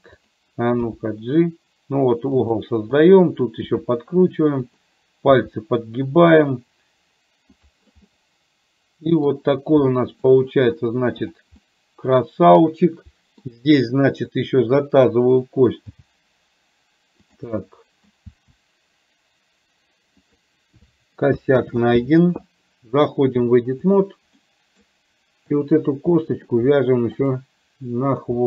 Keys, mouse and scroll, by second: 0.2 click, 1.0 g, 3.7 r, 5.5 g, 7.7 click, 8.2-9.4 middle drag, 10.0 middle click, 11.4 click, 11.7-12.6 middle drag, 12.7-13.6 middle drag, 14.4 click, 16.1 g, 17.6 middle click, 18.4 g, 21.7 ctrl+z, 23.4-24.2 drag, 24.5 middle click, 25.6 click, 26.1 middle click, 27.2 shift+click.